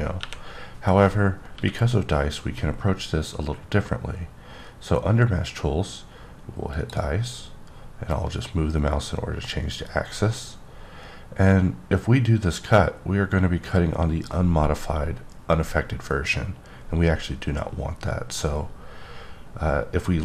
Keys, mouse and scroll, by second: 0.2 KP_1, 1.5 q, 6.7 click, 9.3-10.7 scroll up 7, 10.7 scroll up 3, 11.7-12.2 scroll down 1, 12.2-12.5 scroll down 1, 12.5-14.0 scroll up 5.